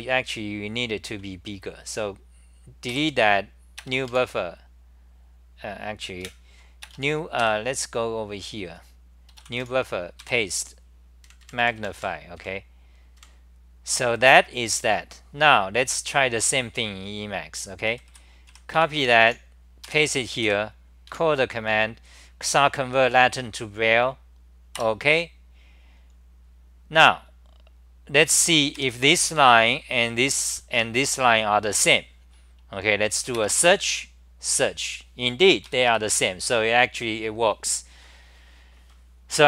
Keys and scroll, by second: 2.9 i, 6.3 super+w, 9.6-10.2 typing, 11.2 super+=, 11.4 super+=, 11.6 super+=, 11.8 super+=, 12.0 super+=, 12.4 super+=, 13.2 super+=, 17.9-21.1 typing, 24.9 Return, 28.7-31.2 typing, 29.3 ctrl+g, 34.4 Right, 39.2 Right.